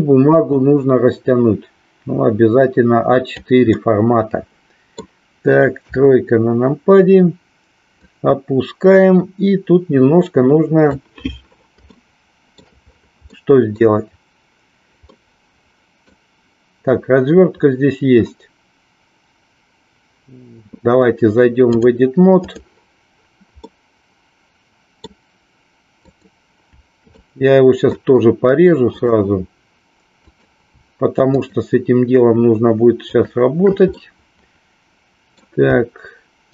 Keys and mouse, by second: 0.5-3.4 drag, 3.7-5.2 middle drag, 5.8 KP_1, 8.0-11.0 drag, 12.0 shift+middle click, 13.4 middle click, 15.2-16.3 middle drag, 21.5-22.5 drag, 23.8-25.2 middle drag, 25.9 click, 27.2 middle click, 29.0 click, 30.2 click, 31.4 shift+click, 34.0-35.5 middle drag, 36.4 shift+click.